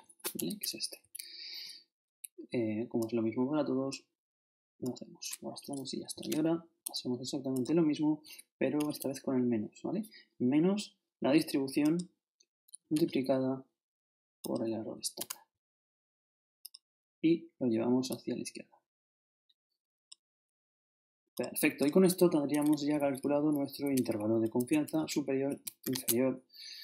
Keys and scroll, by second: 0.3 shift+Return, 1.0 shift+Up, 6.2 shift+0, 8.8 shift+-, 15.2 shift+Return, 22.8 shift+Left, 23.0 shift+Down, 24.5 shift+super+Down, 25.1 shift+super+Home, 25.8 shift+Home, 25.8 shift+Up.